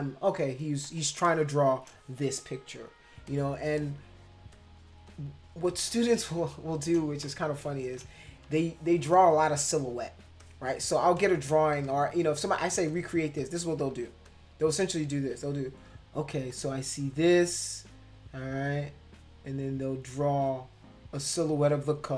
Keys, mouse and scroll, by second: 0.7 space, 0.8 click, 1.2 click, 3.2 space, 3.3 click, 3.8 click, 4.5 click, 5.0 click, 6.1 click, 7.2 space, 7.3 click, 8.5 space, 8.5 click, 9.1 click, 9.6 click, 10.4 click, 11.1 click, 11.8 click, 12.4 click, 12.9 click, 13.4 click, 13.9 click, 14.2 click, 16.5-21.9 drag.